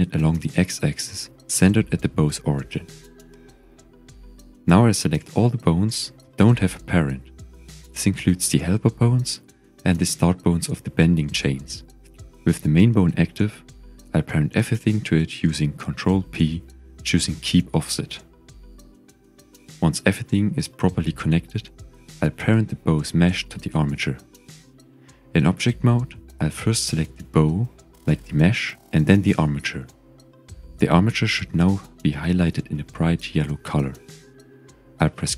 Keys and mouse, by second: 0.1 click, 1.5 click, 2.3 click, 2.7-4.1 drag, 5.9 r, 6.2 KP_Subtract, 6.5 KP_9, 6.6 KP_0, 6.8 KP_Enter, 8.6 click, 9.6 shift+click, 10.2 shift+click, 11.0 shift+click, 11.6 shift+click, 12.8 shift+click, 13.4 shift+click, 14.8 shift+click, 16.3 ctrl+p, 18.8 g, 20.0 click, 21.8 ctrl+s, 23.6 Tab, 24.0 drag, 25.0 z, 26.2 click, 29.6 shift+click.